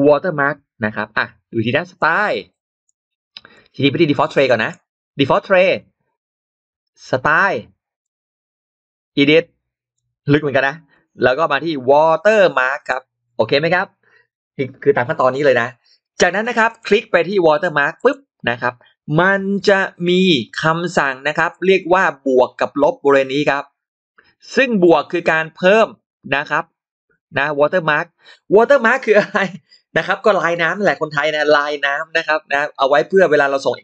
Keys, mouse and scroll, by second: 0.2 click, 0.9 click, 0.9 shift+x, 1.8 click, 3.4-4.5 drag, 5.6-7.3 shift+drag, 7.7 shift+x, 7.9-9.8 shift+drag, 7.9 shift+x, 10.8-12.7 shift+drag, 10.8 shift+x, 13.6 shift+x, 15.1 shift+x, 16.5 shift+right click, 16.6 shift+right click, 17.8 click, 19.6 shift+x, 21.4-24.4 shift+drag, 23.8 shift+x, 24.7-27.4 shift+drag.